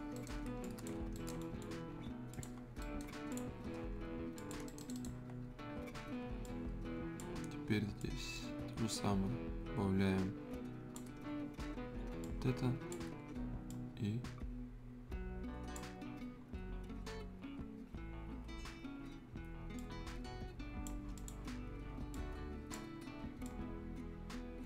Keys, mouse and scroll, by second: 0.1 right click, 0.4 scroll up 1, 0.6 click, 1.0 scroll down 1, 1.1 right click, 1.4-2.3 scroll up 1, 2.3 click, 2.5 scroll up 1, 2.8 right click, 3.3 click, 4.6 right click, 5.3 scroll down 1, 5.6-6.3 scroll up 1, 6.4 click, 7.4 scroll up 1, 8.0-11.2 drag, 11.2 scroll down 1, 12.2-18.7 drag, 19.7 click, 19.9-24.6 drag.